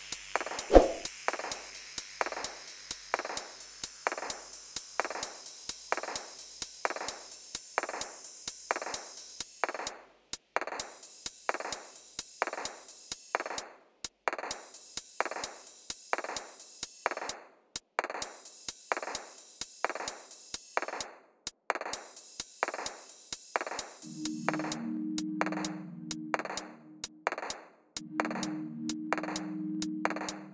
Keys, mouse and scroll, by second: 1.1 click, 3.8 click, 7.2 click, 8.1 click, 8.9-9.6 typing, 9.6 Return, 10.8-11.8 typing, 11.0 click, 15.0-22.7 drag, 21.6 shift+d, 22.7-23.9 right drag, 23.9-25.5 drag.